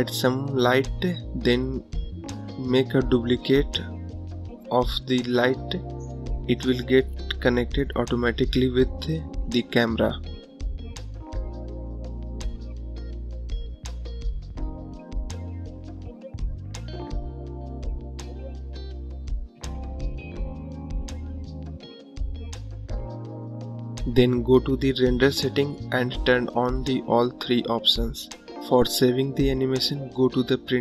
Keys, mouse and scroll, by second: 2.3 click, 3.0 shift+d, 4.8 shift+d, 6.7 shift+d, 7.8 shift+d, 9.4 shift+d, 11.0 shift+d, 13.1-14.3 drag, 15.4-16.8 drag, 16.8 KP_0, 18.5-20.3 drag, 20.3 KP_0, 23.3 click, 26.6 click, 27.7 click, 29.1 click.